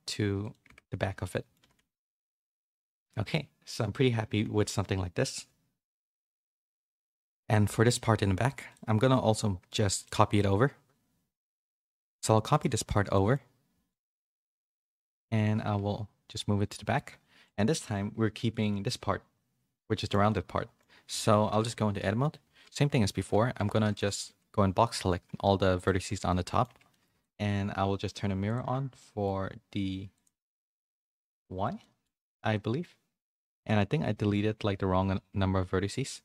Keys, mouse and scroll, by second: 0.6 Tab, 0.8 middle click, 1.6 a, 1.7 a, 1.9 middle click, 2.8 a, 3.0 middle click, 9.3 middle click, 12.4 middle click, 13.1 shift+middle click, 14.1 middle click, 15.1 shift+d, 18.5 middle click, 20.0 shift+middle click, 20.3 middle click, 21.1 Tab, 21.4-23.9 typing, 25.3 x, 25.9 z, 26.2 middle click, 26.9 Tab, 26.9 middle click, 27.2 shift+middle click, 28.4 click, 28.9 middle click, 30.1 click, 30.5 click, 30.8 click, 31.1 click, 31.8 shift+middle click, 32.2 shift+middle click, 32.5 middle click, 33.6-36.2 ctrl+z.